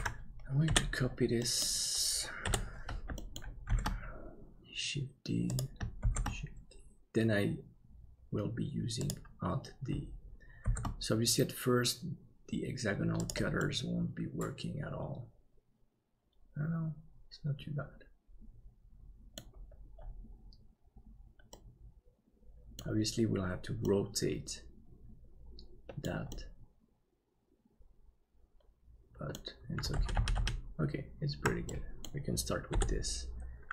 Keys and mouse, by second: 0.0 ctrl+s, 0.6 KP_7, 1.4 middle click, 3.1 shift+middle click, 3.7 shift+d, 10.6 shift+d, 13.6-19.5 middle drag, 21.6-22.8 middle drag, 23.9-31.0 middle drag, 30.3 ctrl+z, 31.0 ctrl+z, 31.7 middle click, 32.7 KP_7.